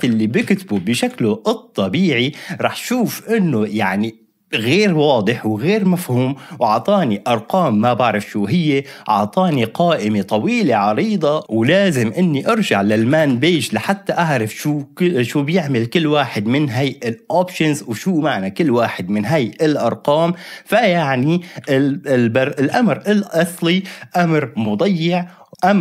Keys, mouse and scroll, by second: 0.0-1.0 typing, 1.9 Return, 9.5-10.4 scroll up 2, 10.4-11.4 scroll up 1, 11.4 ctrl+l, 11.4 typing, 12.7-14.0 typing, 21.7 typing, 22.7 ctrl+l.